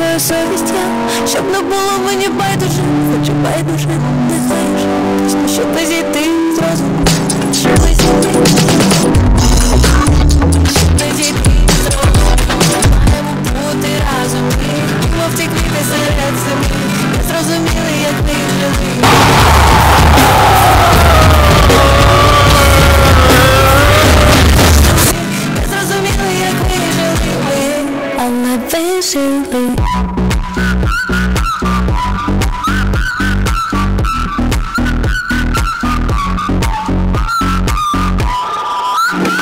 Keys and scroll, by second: 13.2 Page_Down, 25.2 Page_Down.